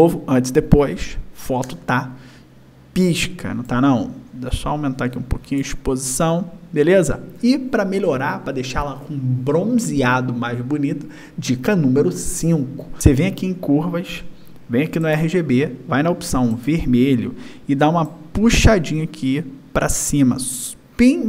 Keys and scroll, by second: 0.0 y, 2.6 y.